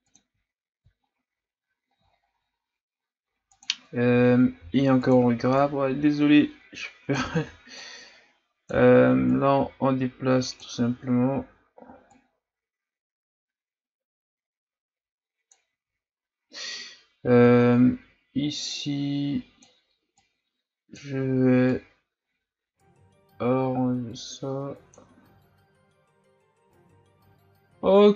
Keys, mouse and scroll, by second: 0.4-0.9 scroll down 4, 0.9-2.1 shift+scroll up 5, 2.1-3.6 shift+scroll down 5, 3.6 click, 4.5 f, 5.6-7.3 drag, 7.3 ctrl+z, 7.8-15.5 drag, 17.5-18.7 shift+scroll up 4, 18.7-24.9 drag, 25.8 scroll down 3, 26.4-26.9 scroll up 5.